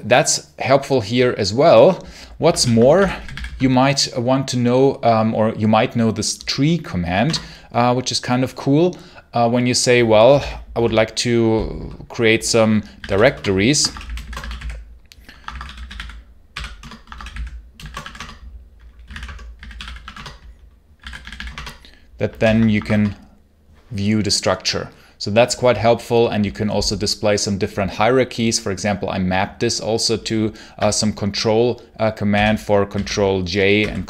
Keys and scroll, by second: 2.4 ctrl+l, 2.5-3.5 typing, 7.1 Return, 9.9-10.7 typing, 12.6-21.4 typing, 16.6 Return, 16.9 Escape, 21.4 Return, 22.3 ctrl+l, 22.6 Escape, 22.7 k, 22.8 Return, 32.2 ctrl+k, 32.8 ctrl+j, 33.6 ctrl+h.